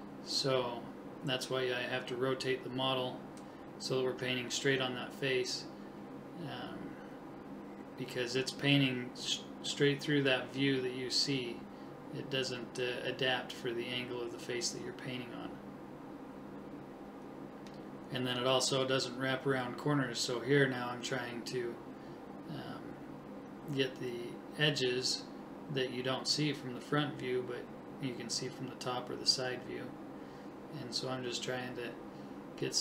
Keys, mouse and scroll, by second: 2.0 click, 2.6 middle click, 4.9-6.2 middle drag, 8.0 click, 9.3 click, 10.1 right click, 10.3 middle click, 11.2 right click, 11.5 middle click, 11.6 right click, 11.8 right click, 12.1 middle click, 13.5 KP_3, 15.0 click, 15.1 middle click, 15.5 click, 16.8 click, 17.9 shift+h, 19.3 click, 21.2 middle click, 22.4 ctrl+KP_3, 23.2 right click, 24.1 middle click, 24.7 right click, 27.4 click, 29.2-30.2 middle drag, 30.8 ctrl+z, 31.3-32.5 middle drag.